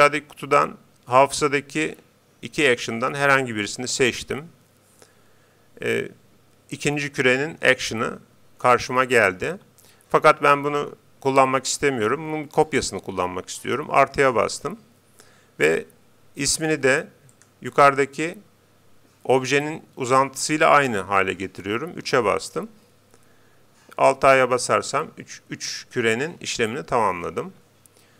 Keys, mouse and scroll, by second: 14.2-15.9 drag, 16.7-18.3 drag, 24.5 alt+a, 27.5 Escape.